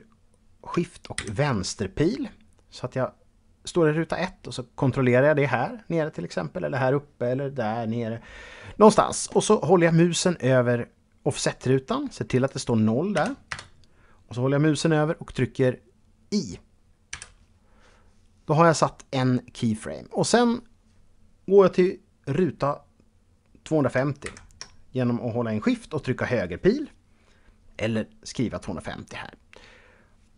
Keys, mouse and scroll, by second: 0.8 shift+Left, 12.0 click, 12.8 KP_0, 13.1 Return, 16.8 i, 23.8 shift+Right.